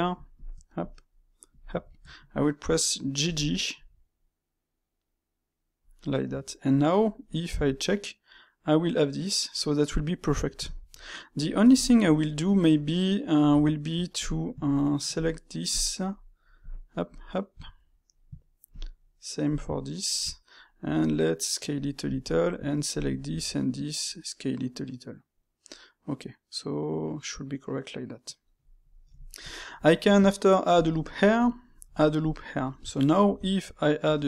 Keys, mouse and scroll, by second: 0.2 shift+click, 0.5-1.4 middle drag, 1.4 shift+click, 1.8-3.1 ctrl+shift+middle drag, 3.1 g, 6.6-7.4 middle drag, 7.4 a, 7.8-13.4 middle drag, 13.4 Tab, 14.1 alt+click, 15.1 alt+shift+click, 15.6 alt+shift+click, 17.0 alt+shift+click, 17.6-18.6 middle drag, 18.6 alt+shift+click, 19.4 alt+shift+click, 20.2 middle click, 20.8 s, 22.1 alt+click, 22.8 alt+shift+click, 23.2 s, 28.8-30.6 middle drag, 30.6 ctrl+r, 31.3-31.7 middle drag, 31.7 ctrl+r, 32.6-33.2 middle drag, 33.2 Tab, 33.5-34.0 middle drag, 34.0 space.